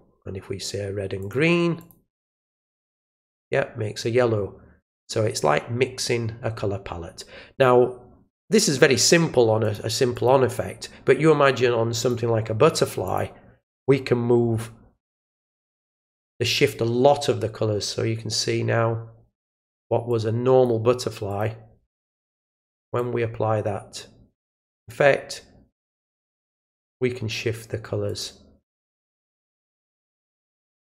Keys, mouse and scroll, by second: 1.2 click, 1.8 click, 9.6 click, 10.1 click, 12.0 click, 13.0 click, 15.5 click, 20.1-20.6 drag, 21.3 click, 22.9-24.9 drag, 28.0 click, 28.8 click.